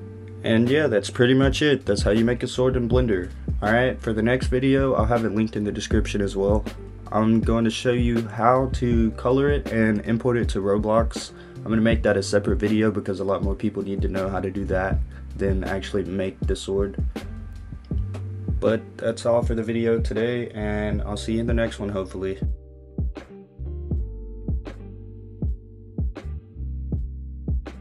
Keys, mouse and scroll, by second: 0.9 click, 1.7 click, 2.0 right click, 3.8 click, 4.3 shift+middle click, 5.0 click, 5.3 right click, 7.7 click, 8.2 shift+middle click, 8.4 click, 17.7 shift+middle click, 26.3 click, 27.1 click, 27.5 click.